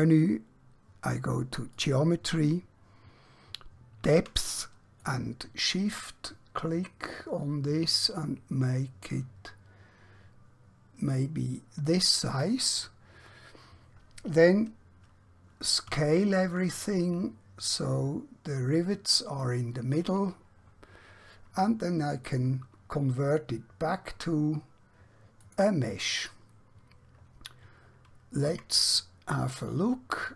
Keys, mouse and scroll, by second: 1.7 click, 2.6-4.6 scroll down 1, 5.0 shift+click, 16.0 s, 19.5 click, 22.3 click, 25.5 click, 28.5 Tab.